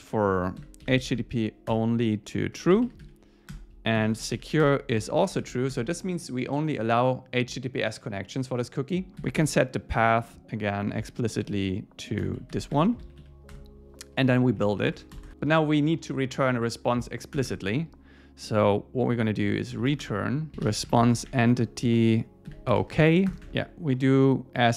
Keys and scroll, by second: 0.3 shift+super+Left, 1.7 Return, 3.0 Right, 3.5 Return, 4.7 Return, 5.7 Escape, 9.1 Return, 10.1 Return, 12.7 Escape, 13.0 Right, 13.5 Return, 14.2 Down, 14.6 shift+Up, 14.9 shift+super+Left, 17.4 Return, 21.6 Return, 23.3 Return, 23.5 Tab.